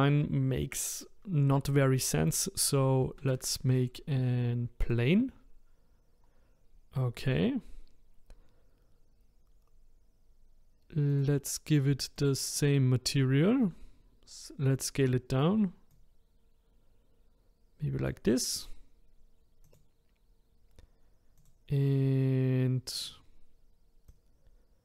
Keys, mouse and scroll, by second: 3.0 shift+a, 5.9-7.5 scroll down 1, 11.1-13.6 drag, 13.6 s, 15.9 click, 19.6-21.5 drag, 23.0-24.2 drag.